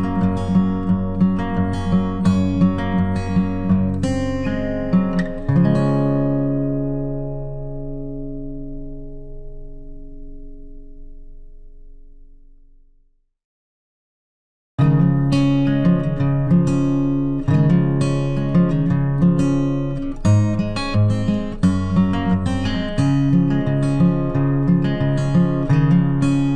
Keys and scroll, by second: 8.5 ctrl+t.